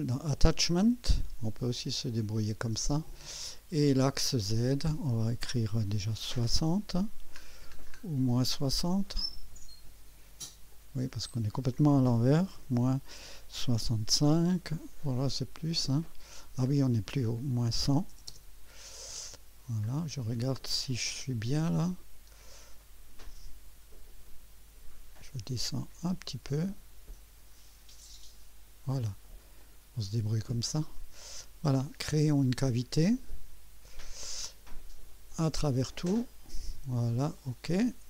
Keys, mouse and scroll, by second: 1.1 click, 1.7 click, 4.5 click, 6.2 KP_6, 6.5 KP_0, 7.4 scroll down 1, 7.9-8.8 scroll up 3, 10.7 click, 12.5 KP_Subtract, 13.6 KP_6, 13.8 KP_5, 16.1 click, 17.6 KP_Subtract, 17.8 KP_1, 18.1 KP_0, 19.8 scroll up 2, 21.1-21.8 drag, 22.3 scroll up 1, 22.8-23.4 right drag, 24.2 scroll up 2, 26.7 scroll down 2, 27.3 scroll down 1, 27.8-28.2 scroll up 2, 29.6 click, 30.5-31.7 drag, 33.0 click, 35.3 click, 35.9 click, 37.4 click.